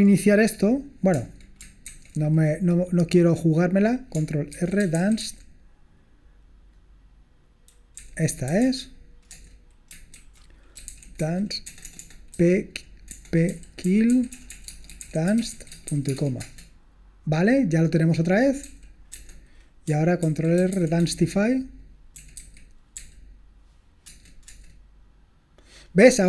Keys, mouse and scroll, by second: 1.9 ctrl+c, 4.6 ctrl+r, 4.7-5.7 typing, 8.1 Down, 8.5 Down, 8.6 Down, 9.3 Return, 10.2 ctrl+a, 10.6-16.4 typing, 16.4 Return, 20.3 ctrl+r, 20.4-22.9 typing, 24.1 Return, 24.5 Return.